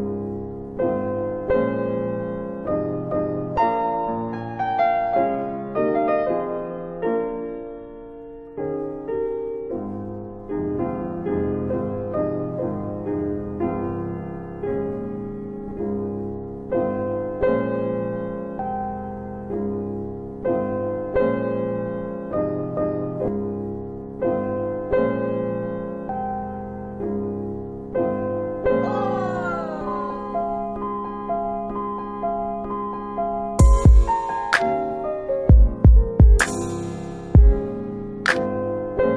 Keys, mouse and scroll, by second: 0.9 click, 16.8 click, 18.4 click, 28.7 alt+click, 29.1 alt+click, 29.5 alt+right click, 30.0 alt+right click, 30.1 alt+click, 30.4 alt+click, 30.8 alt+middle click, 31.0 alt+middle click, 31.4 alt+click, 32.0 alt+click, 32.4 alt+middle click, 32.7 alt+middle click, 33.0 alt+right click, 33.2 alt+right click, 33.5 alt+click, 33.8 alt+click, 34.2 alt+right click, 34.5 alt+right click, 34.9 alt+right click, 35.4 alt+right click, 36.0 alt+click, 36.1 alt+click, 36.5 alt+middle click, 36.8 alt+middle click, 37.2 alt+right click, 37.3 alt+right click, 37.6 alt+click, 38.0 alt+click.